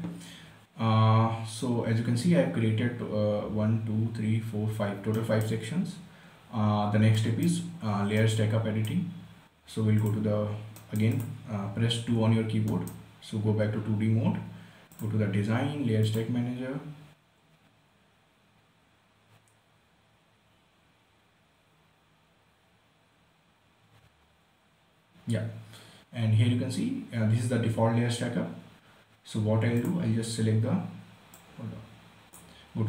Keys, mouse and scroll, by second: 5.5 right click, 6.4-6.8 scroll down 1, 6.8 scroll up 1, 7.4-10.3 right drag, 10.3 click, 11.1 right click, 11.5 click, 12.5 2, 13.0 right click, 13.4-15.3 scroll down 1, 15.3 click, 30.2-32.8 drag.